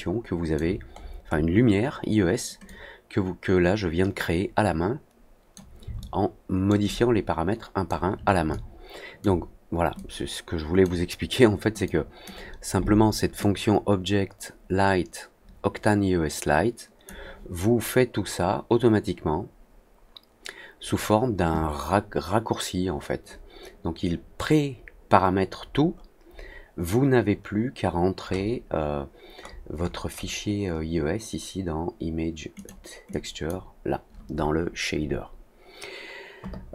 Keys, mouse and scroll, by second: 0.9 middle click, 1.2 middle click, 2.6-5.5 drag, 5.9 alt+middle click, 6.8-7.8 alt+drag, 8.4 alt+click, 9.9 click, 11.8 click, 13.3-17.0 drag, 24.7 middle click, 24.8-25.8 scroll down 4, 25.3 middle click, 26.2 scroll down 2, 28.2 scroll up 2, 29.3 scroll up 2, 29.4 scroll down 2, 29.7-30.2 scroll up 4, 32.5 click, 33.0 click.